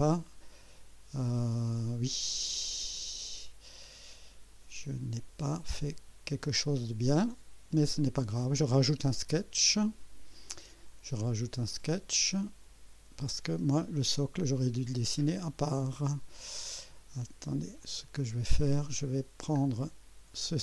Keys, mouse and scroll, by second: 12.5 click, 17.8 click, 18.9-19.7 scroll down 2, 20.4 click.